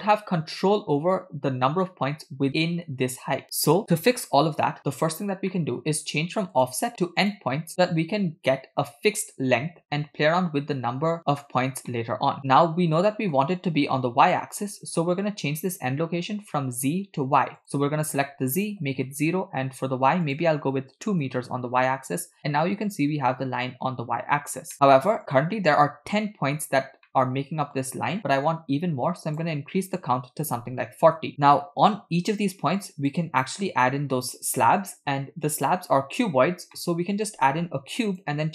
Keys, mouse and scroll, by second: 5.5 middle click, 6.6-7.3 drag, 11.9 middle click, 12.4 scroll up 6, 12.6-13.3 shift+middle drag, 17.6-19.0 drag, 20.2-21.3 drag, 24.9 middle click, 25.4-27.0 scroll up 1, 27.0 scroll up 2, 27.1-27.9 middle drag, 29.3-31.2 drag, 31.3 middle click, 31.3 scroll down 3, 33.1 click, 36.8 middle click, 37.3 shift+a.